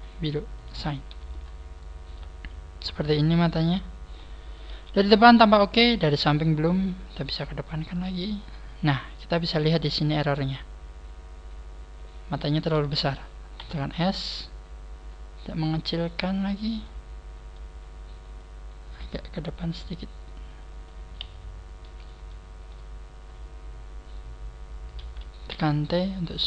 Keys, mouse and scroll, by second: 0.5 click, 1.1 a, 1.3-1.9 scroll down 8, 2.1 Tab, 2.3 scroll down 3, 2.8 middle click, 4.7 KP_1, 5.1-6.3 scroll up 6, 6.7 scroll up 5, 7.2 click, 7.4 click, 7.4-7.9 scroll up 1, 10.5 click, 16.5 click, 16.8 click, 16.8 middle click, 18.4 click, 21.1 KP_1, 22.2 shift+middle click, 23.2 scroll up 1, 23.7 scroll down 1, 24.0 scroll down 2, 25.5 t.